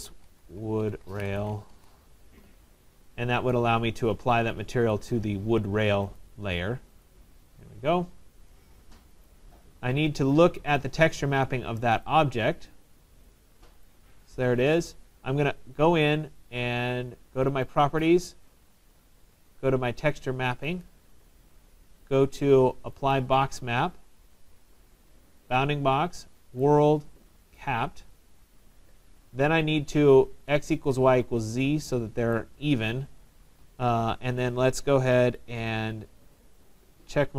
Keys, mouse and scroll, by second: 0.0-1.9 typing, 3.6 right click, 5.1 click, 6.3 Return, 6.3 right click, 7.1 click, 9.3 click, 10.8 click, 12.1 click, 12.1 click, 12.8 middle click, 12.9 middle click, 12.9 middle click, 13.9 right click, 17.8 click, 20.9 click, 23.2 click, 25.5 click, 26.6 click, 27.6 click, 30.9 click, 32.4 right click, 33.6 right click, 33.6 click, 36.7 click, 36.7 right click.